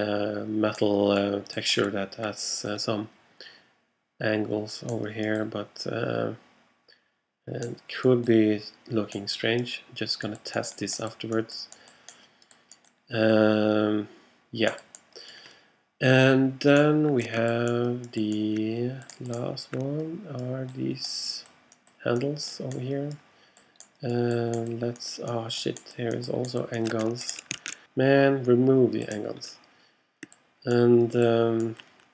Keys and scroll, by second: 27.6 alt+super+a.